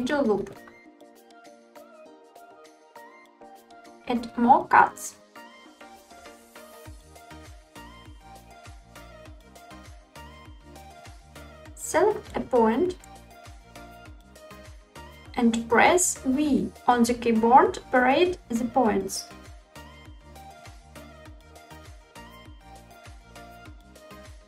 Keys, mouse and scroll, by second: 1.9 click, 5.2 ctrl+r, 6.9 click, 7.2 middle click, 8.6 ctrl+r, 9.5 click, 10.2 middle click, 11.0 middle click, 11.0 scroll up 1, 11.2 1, 12.1-13.1 drag, 16.3 v, 22.5 click, 23.2 middle click, 23.8 click.